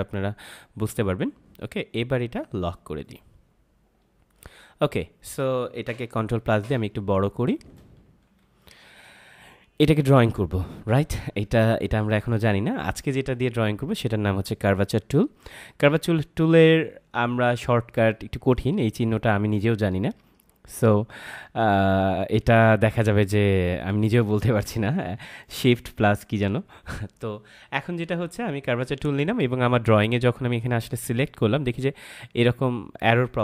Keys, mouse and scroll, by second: 3.0 click, 6.3 ctrl+=, 7.2 space, 7.4 click, 8.0 ctrl+=, 8.4 space, 8.6 click, 8.9 space, 25.4 click.